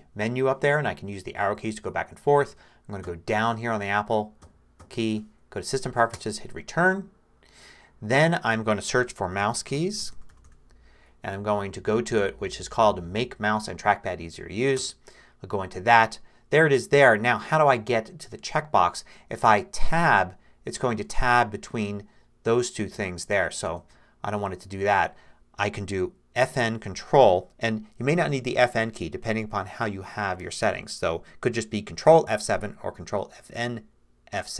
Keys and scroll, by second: 0.8 Right, 1.4 Left, 1.9 Right, 2.2 Left, 3.0 Down, 4.4 Down, 6.1 Return, 8.8-10.9 typing, 11.4 Down, 14.8 Return, 19.9 Tab, 21.0 Tab, 23.7 Return.